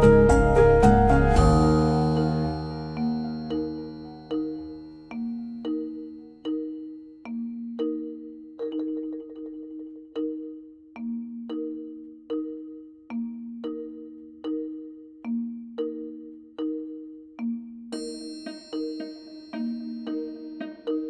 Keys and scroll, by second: 16.0 ctrl+z, 17.7 b.